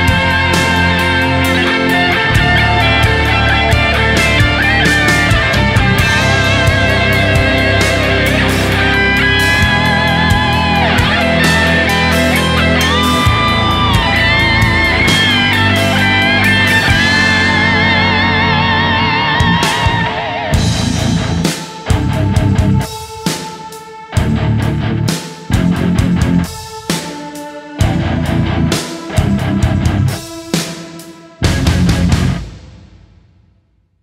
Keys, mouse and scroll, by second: 0.9-1.9 typing, 2.3 alt+click, 5.4 right click, 6.1 alt+click, 6.9 right click, 8.4 s, 8.6 alt+click, 11.0 s, 11.3 double click, 12.4 s, 12.7 alt+click, 14.4 s, 14.7 alt+click, 15.6 s, 15.8 double click, 17.6 shift+click, 20.1 alt+right click, 21.2 alt+right click, 23.7 alt+click, 33.9 right click.